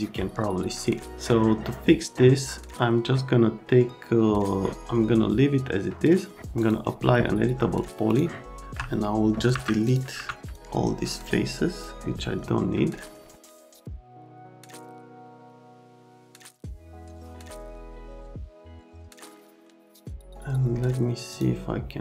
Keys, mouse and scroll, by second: 6.6 click, 8.1 click, 8.6 alt+middle click, 9.9 click, 10.5 click, 11.8 click, 12.1 middle click, 13.4 click, 13.6 click, 14.0 click, 14.7 middle click, 15.0 middle click, 15.2 click, 15.6 click, 15.7 Delete, 16.0 click, 16.2 click, 16.3 Delete, 16.4 click, 16.7 right click, 17.1 click, 17.7 f, 18.2 l, 18.7 click, 19.0 click, 19.1 middle click, 19.5 middle click, 19.8 click, 19.9 middle click, 20.0 click, 21.3 middle click.